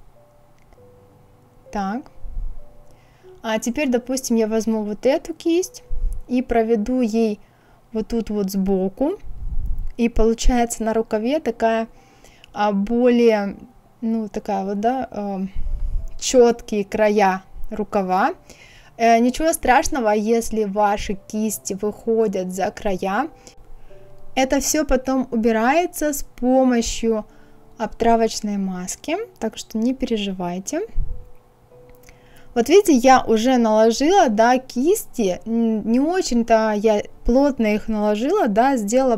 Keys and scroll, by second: 24.1 ctrl+z.